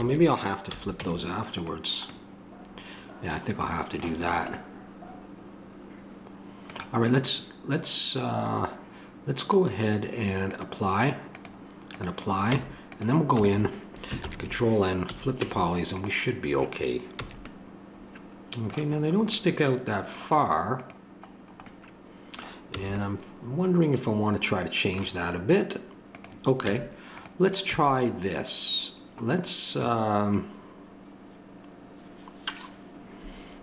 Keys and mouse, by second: 0.7 a, 1.0 Tab, 9.4-14.2 drag, 12.5 Tab, 13.3 a, 14.2 ctrl+n, 15.1 a, 15.4 Tab, 17.2 a, 20.8-22.8 drag, 22.8 a, 26.1-31.2 drag, 26.6 Tab, 27.7 a.